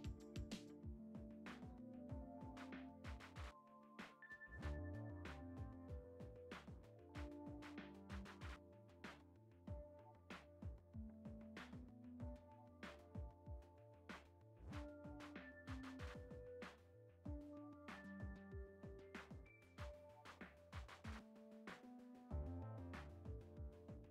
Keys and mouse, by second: 1.0 shift+d, 2.2 r, 2.9 shift+d, 3.9 r, 5.0 middle click, 5.6 ctrl+Tab, 6.9 click, 10.4-10.8 middle drag, 10.9 shift+middle drag, 11.4 g, 13.8 middle click, 14.3 shift+middle drag, 14.8 s, 16.2 click, 16.7 shift+middle click, 17.5 middle click, 18.7 shift+right click, 19.6 F6, 20.2 shift+a, 21.3 shift+middle click, 22.2 s, 23.2 g.